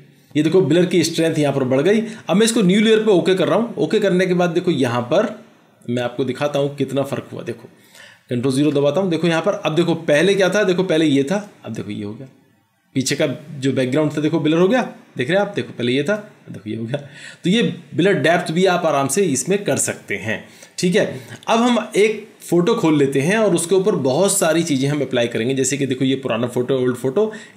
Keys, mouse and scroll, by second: 8.6 ctrl+0.